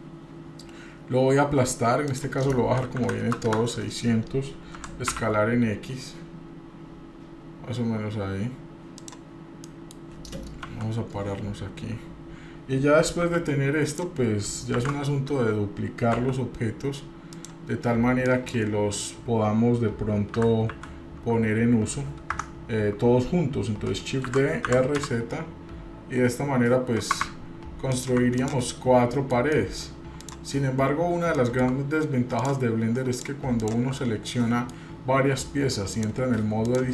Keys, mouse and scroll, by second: 2.1-3.6 drag, 3.2 KP_0, 4.8 s, 9.6 middle click, 10.6 KP_7, 11.5 scroll up 1, 11.7-12.1 scroll down 2, 13.2 g, 14.7 shift+d, 18.3 click, 24.3 shift+d, 28.4 click, 28.7 scroll down 1, 28.7-29.4 middle drag, 29.5 middle drag, 30.2 drag, 30.8-31.2 scroll up 1, 31.3 shift+middle drag, 32.3-32.8 shift+drag, 33.1 shift+click, 33.6 shift+click, 34.0-34.8 middle drag, 35.9 click.